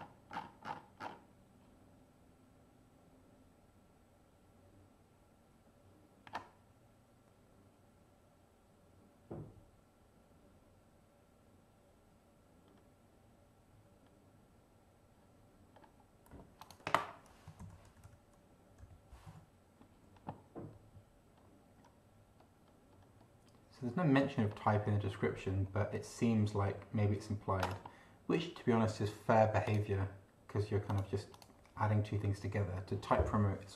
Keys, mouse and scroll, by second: 0.3 scroll down 2, 1.0-1.3 scroll down 2, 12.7-13.1 scroll up 2, 14.1-14.5 scroll up 2, 15.7-16.2 scroll up 2, 16.6 click, 17.6 ctrl+f, 17.9 ctrl+t, 18.0 ctrl+y, 18.8 p, 19.3 e, 21.4-21.8 scroll up 2, 22.4-23.5 scroll up 2, 23.8-24.2 scroll up 2, 24.4-25.5 scroll down 4, 25.7-27.4 scroll down 6, 29.6 click, 30.9 click, 31.3 click.